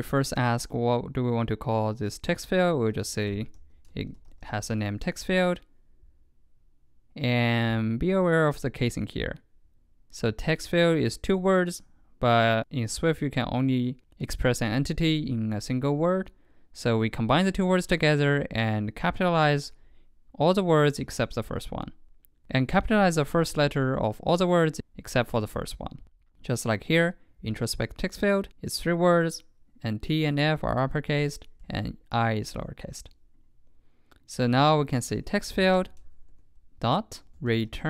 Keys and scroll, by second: 4.8 super+Right.